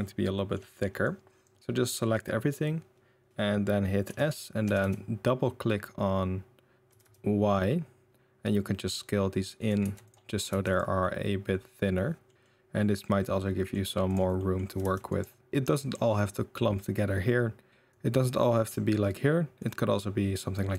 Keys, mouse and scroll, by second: 0.3 middle drag, 1.1-1.4 drag, 4.0 s, 9.8 Tab, 10.0 click, 10.3 middle click, 10.5 Tab, 10.7 click, 11.0-12.5 middle drag, 13.0-13.7 middle drag, 14.3 middle drag, 14.6 r, 15.5 g, 15.7 middle drag, 17.2-17.7 middle drag, 17.7 KP_7, 17.9 click, 19.6-20.7 drag.